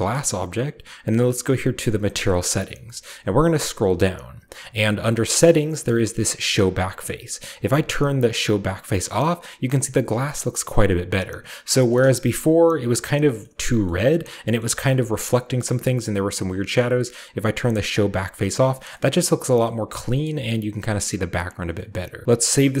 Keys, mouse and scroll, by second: 1.8 click, 2.8-3.1 scroll down 2, 4.0-5.5 scroll down 1, 6.5-8.9 scroll up 2, 7.6 click, 8.9-9.8 scroll down 1, 9.1-10.7 middle drag, 10.8-11.9 middle drag, 11.8-13.4 shift+drag, 12.3-13.4 shift+middle drag, 12.3-13.4 shift+scroll up 2, 13.5-14.3 scroll up 1, 13.9-14.3 middle drag, 14.6 shift+middle drag, 14.9-15.6 shift+middle drag, 15.7-16.6 scroll up 1, 15.7-16.8 middle drag, 16.6-17.7 scroll up 1, 17.9 click, 18.3-18.9 scroll down 2, 18.9-19.5 middle drag, 19.7-20.0 middle drag, 19.7-20.0 scroll down 2, 20.3-21.8 middle drag, 20.3-21.8 scroll up 2, 22.2 alt+Left, 22.2-22.8 ctrl+middle drag, 22.2-22.8 scroll down 1.